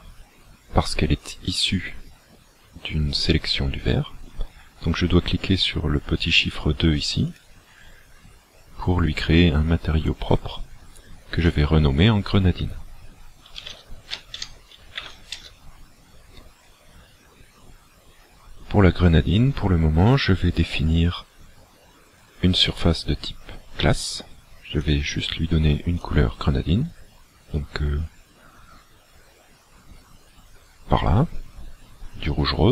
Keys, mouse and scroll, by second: 7.3 click, 11.4 click, 24.8 click.